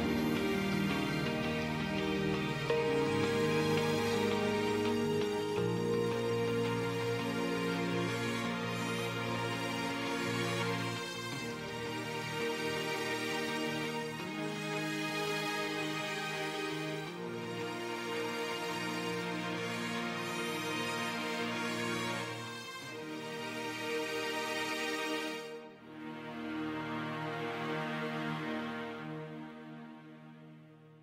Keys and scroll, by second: 3.0 space, 9.0 space, 11.4 space, 14.4 space, 20.9 ctrl+alt+z.